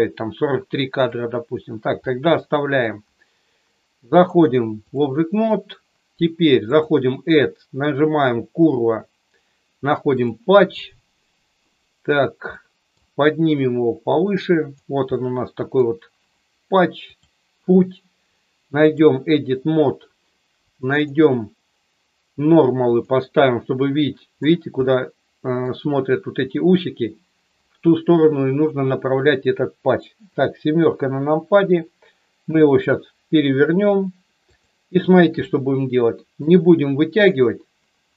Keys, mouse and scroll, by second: 0.2-1.1 drag, 2.5 middle click, 4.4 click, 6.7 click, 11.7 scroll up 1, 11.9 middle click, 12.5 middle click, 13.5 click, 15.2 middle click, 17.0 click, 21.1 click, 24.8 middle click, 30.2 KP_7, 32.5 r, 34.5 click, 35.5 middle click.